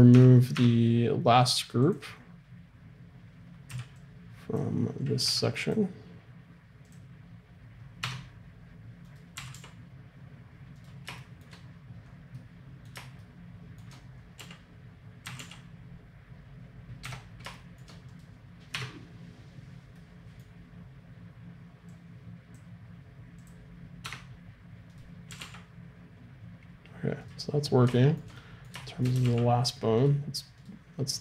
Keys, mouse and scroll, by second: 0.1 Tab, 0.6 Tab, 1.8 middle click, 3.7 b, 5.3 b, 6.9 click, 8.0 Tab, 9.1-11.2 right drag, 9.4 r, 14.4 z, 15.3 r, 18.1-20.0 drag, 18.8 Tab, 21.9-24.1 drag, 24.1 Tab, 24.9 right click, 25.3 r, 29.2 r, 30.6-31.2 right drag.